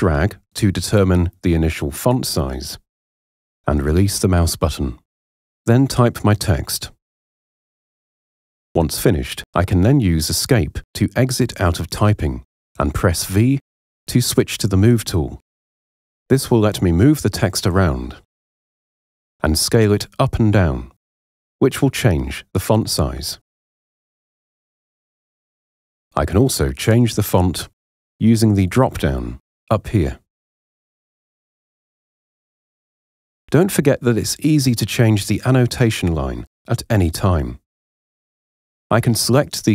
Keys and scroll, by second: 5.5-8.6 typing, 10.7 Escape, 13.3 v.